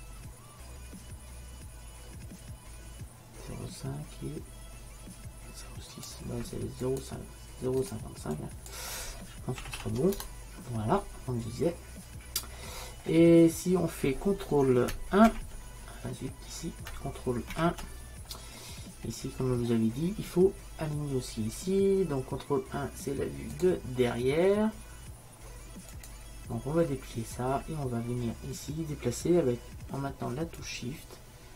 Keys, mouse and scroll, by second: 6.9-8.9 drag, 13.6-15.2 middle drag, 21.1 ctrl+m, 23.6-31.5 drag.